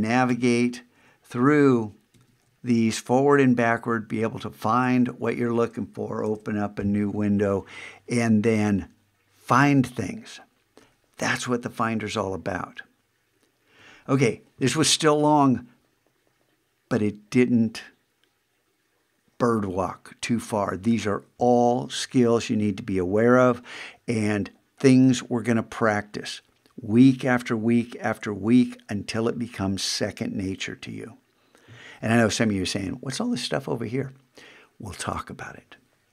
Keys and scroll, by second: 1.4 shift+super+Tab, 6.2 super+n.